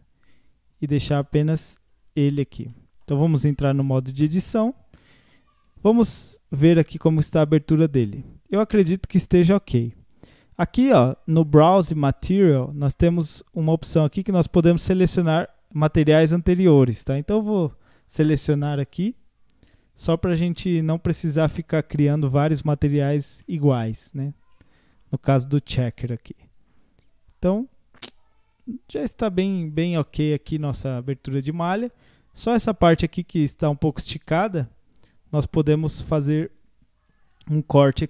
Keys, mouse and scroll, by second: 2.1 click, 2.7-3.4 shift+middle drag, 3.4 Tab, 3.8-5.7 middle drag, 5.7 a, 6.6-7.0 scroll up 7, 7.2-13.1 shift+middle drag, 13.1-16.1 drag, 20.2 scroll down 1, 20.6-22.6 middle drag, 22.6 click, 23.1-23.5 scroll up 1, 23.5-25.0 middle drag, 25.0 Tab, 25.5-25.9 scroll down 1, 25.9-28.9 middle drag, 30.2 scroll up 1, 30.6-33.3 middle drag, 33.3 Tab, 33.7 scroll up 1, 34.3 click, 36.5 alt+shift+click.